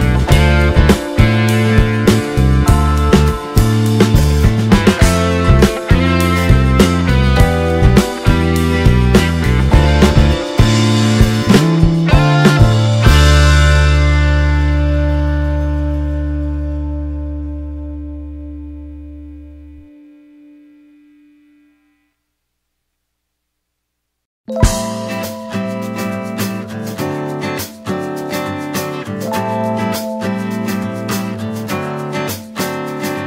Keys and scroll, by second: 10.1 t.